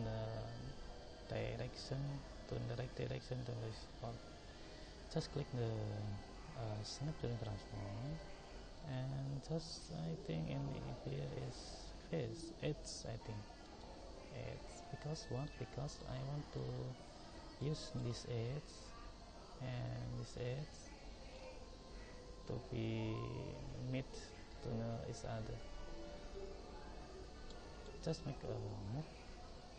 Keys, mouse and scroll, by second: 7.3-10.6 drag, 15.4-23.4 middle drag, 27.8 middle drag, 28.2-29.3 middle drag.